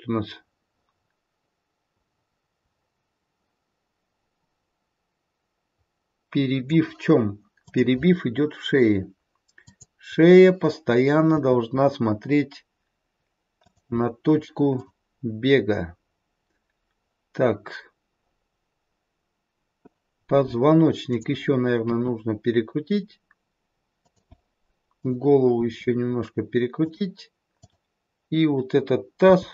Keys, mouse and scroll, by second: 7.5 click, 9.6 click, 11.4 r, 14.6 click, 21.1 click, 21.9 r, 25.4 click, 25.4 r, 27.5 click, 29.2 g.